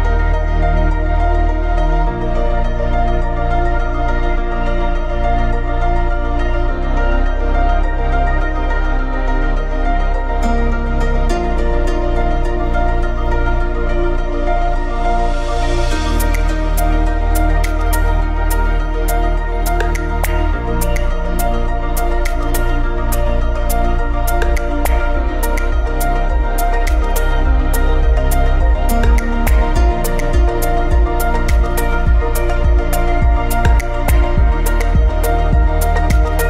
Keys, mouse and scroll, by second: 1.0 click, 1.4-1.8 scroll up 2, 1.8-3.7 middle drag, 3.7 x, 4.4 ctrl+v, 5.2-5.5 scroll up 2, 5.5-6.5 middle drag, 6.5-7.8 scroll up 2, 7.8-9.0 scroll up 1, 9.0-10.1 scroll up 1, 10.1-13.4 scroll up 1, 13.4-14.0 scroll up 1, 14.0 m, 14.2-15.6 scroll down 2, 15.6 scroll up 2, 15.7 middle click, 16.3-17.1 scroll up 2, 17.1-18.5 scroll up 1, 18.5-19.1 scroll up 1, 19.1-21.4 scroll up 1, 21.4-22.4 scroll up 1, 22.4 ctrl+shift+click, 24.6 scroll up 1, 24.7 ctrl+shift+click, 25.2-26.5 middle drag, 26.5-33.2 drag, 33.2 KP_Enter, 35.4 scroll down 1, 35.5-36.4 drag.